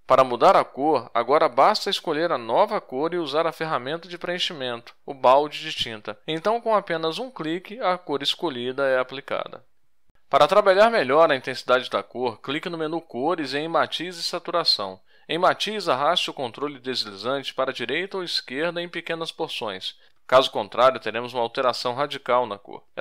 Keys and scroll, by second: 7.6 ctrl+shift+a, 9.2 Tab, 9.9 ctrl+shift+j, 13.1 Tab, 13.5 ctrl+shift+j.